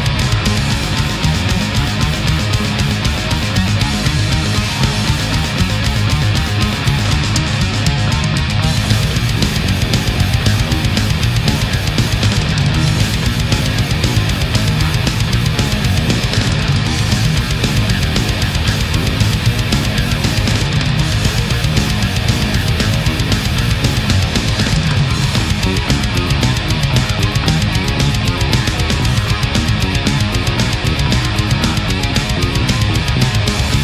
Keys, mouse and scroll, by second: 0.7 l, 0.8 o, 1.3 p, 4.5 click, 6.0 click, 7.5 ctrl+z, 9.5 right click, 10.0 space, 11.3 click, 12.5 click, 14.7 click, 15.8 a, 18.3 click, 19.5 right click, 20.4-22.6 drag, 22.9-23.7 middle drag, 25.9 right click, 26.5 shift+right click, 27.0 shift+right click, 28.2-30.8 drag, 30.9 ctrl+z, 31.4 ctrl+shift+z, 32.5 shift+right click, 32.8-33.5 shift+middle drag.